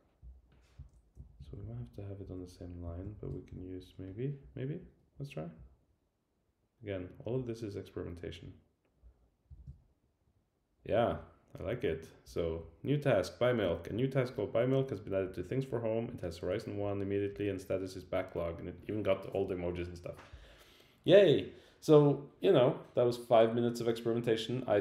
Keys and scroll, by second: 1.1 super+Left, 1.4 Down, 2.2 Up, 2.9 super+Right, 3.5 super+Right.